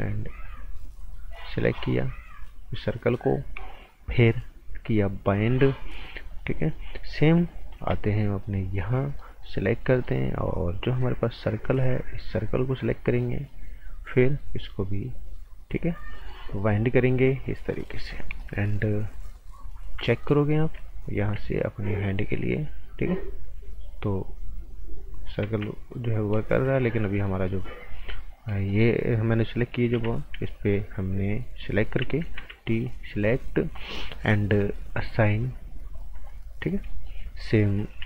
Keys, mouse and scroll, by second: 0.4 click, 5.4 click, 6.5 right click, 7.8 b, 8.8 click, 9.2 right click, 9.9 alt+right click, 11.7 t, 12.8 click, 16.4 click, 17.7 right click, 18.0 scroll down 1, 18.1 right click, 19.0-19.8 scroll up 1, 19.8 z, 20.1 scroll down 1, 20.3 right click, 21.0 click, 21.3 z, 22.0 click, 25.4 ctrl+z, 25.7 scroll up 1, 25.9 right click, 29.9 b, 30.6 click, 32.3 t, 32.7 click, 36.2 right click, 37.9 v.